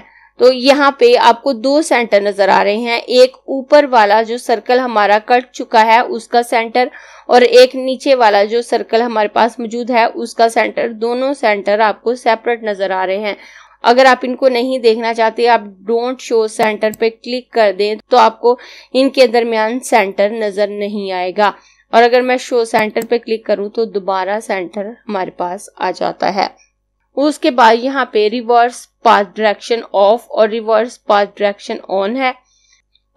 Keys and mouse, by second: 16.5 click, 22.7 click.